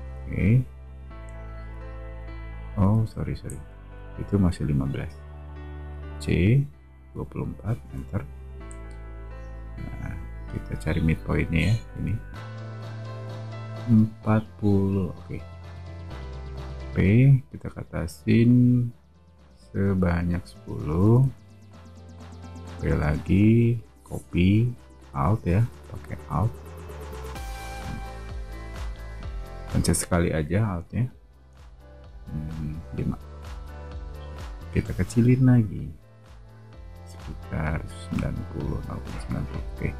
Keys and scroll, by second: 1.6 c, 3.4 super+z, 6.1-7.8 typing, 15.6 space, 16.4 p, 20.3-21.3 typing, 22.7-23.0 typing, 32.8 5, 32.9 Return, 33.4 space, 34.6 s, 39.5 space.